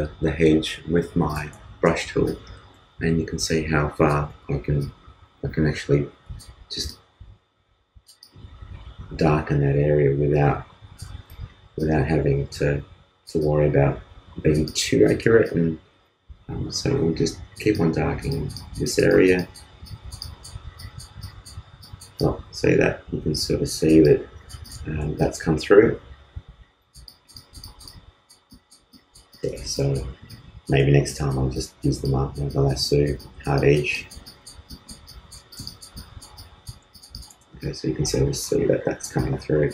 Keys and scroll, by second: 4.3 super+z, 11.1 super+z.